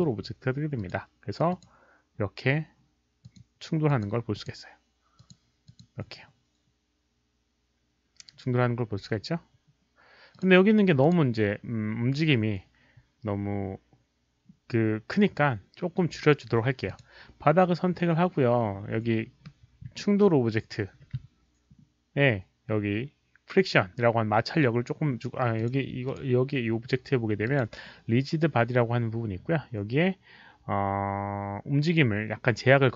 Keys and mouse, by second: 0.7 click, 1.5 click, 3.2 click, 3.8 click, 4.3 click, 5.1 click, 5.6 click, 10.3 click, 11.0 click, 12.3 click, 14.0 click, 16.8 click, 25.5 click, 26.0 click, 27.4 click.